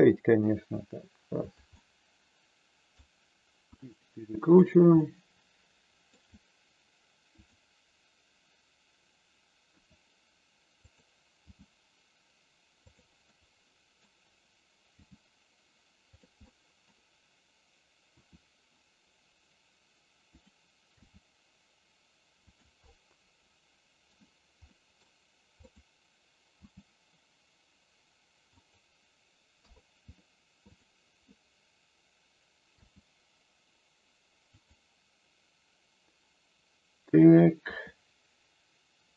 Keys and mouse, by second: 1.5 click, 1.7-3.0 middle drag, 3.7 r, 4.5 click, 5.0-6.1 middle drag, 7.5 click, 9.6 r, 10.7 click, 11.5 g, 12.7 click, 13.1 middle click, 14.9 g, 16.4 middle click, 18.1 r, 20.4 click, 20.9 g, 22.9-24.1 middle drag, 24.7 middle click, 26.5 g, 28.5 click, 29.6 KP_3, 32.7 g, 34.5 click, 37.6 r.